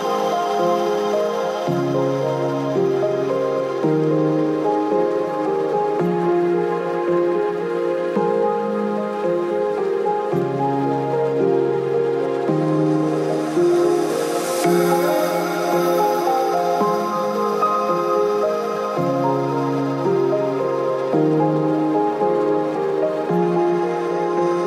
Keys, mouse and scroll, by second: 0.0 middle click, 0.6 click, 1.9 middle click, 2.0 click, 2.3 middle click, 2.4 click, 3.6 click, 4.2 click, 5.5 click, 8.4 click, 9.5 KP_0, 10.3 click, 11.0 middle click, 11.2 click, 12.1 alt+click, 12.4 click, 13.7 click, 13.9 middle click, 14.1 shift+click, 16.8 shift+click, 19.2 middle click, 19.9 right click, 21.2 click, 22.2 click, 24.1 click.